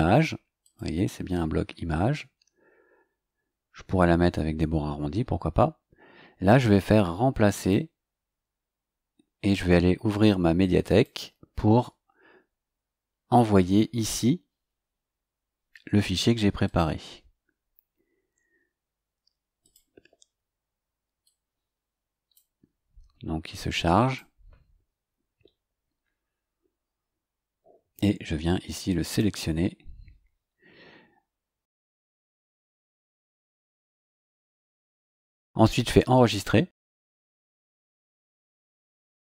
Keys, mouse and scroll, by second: 0.6 click, 7.5 click, 10.8 click, 16.6 click, 19.6 click, 21.2-22.5 drag, 24.0 click, 29.1 click, 34.4 click, 36.1 click.